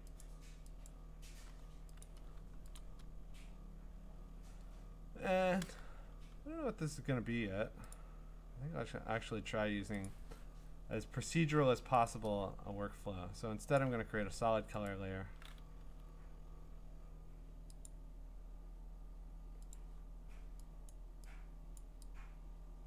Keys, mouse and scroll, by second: 0.9 click, 2.0 click, 2.8 click, 7.9 click, 10.1 click, 12.1 click, 13.8 click, 15.8 Escape, 17.9 click, 19.7 click, 21.8 click.